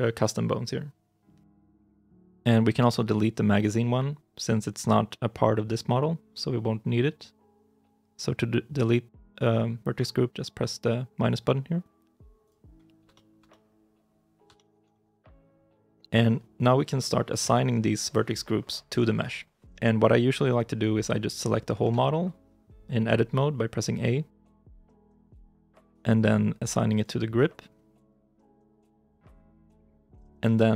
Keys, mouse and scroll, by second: 13.0 shift+middle click, 13.3 middle click, 14.0 scroll down 1, 14.4 shift+i, 14.8 shift+middle click, 21.7 Tab, 24.2 a.